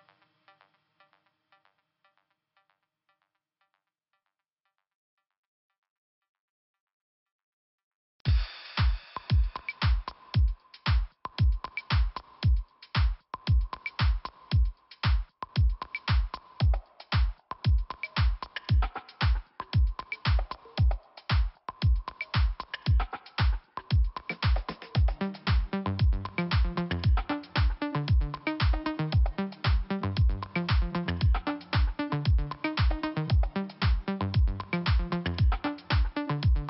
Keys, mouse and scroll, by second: 0.4 click, 5.3 f, 5.8-6.8 scroll down 2, 6.8 scroll up 1, 10.7 click, 11.6 right click, 12.8 click, 13.5 click, 14.4 click, 18.6 click, 19.4 click, 21.4 click, 22.6 click, 26.0 click, 28.3 scroll up 2, 29.1 click, 30.4 click, 31.6 click.